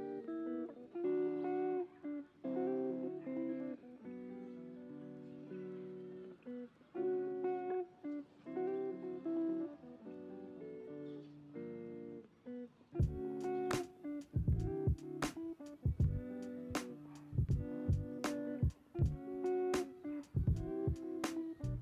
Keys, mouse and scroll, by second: 0.0 Tab, 1.0 ctrl+r, 7.3-7.7 scroll up 2, 8.0-8.3 scroll down 2, 8.5 shift+middle click, 8.9-9.7 scroll up 1, 9.7 click, 10.9 3, 11.7 alt+click, 12.9 e, 14.9 s, 19.9 click, 20.5-21.8 middle drag.